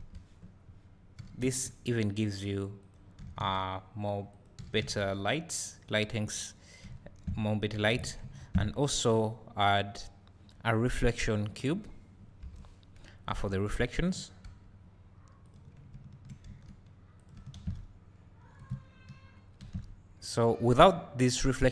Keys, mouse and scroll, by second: 0.0 KP_1, 1.2 g, 2.9 click, 3.2 s, 4.4 click, 4.6 g, 5.6 click, 6.9 `, 12.4 KP_7, 13.3 s, 14.2 click, 14.5 g, 15.5 click, 16.5 s, 17.3 click, 17.6 shift+d, 18.7 click, 19.7 shift+d, 20.3 click.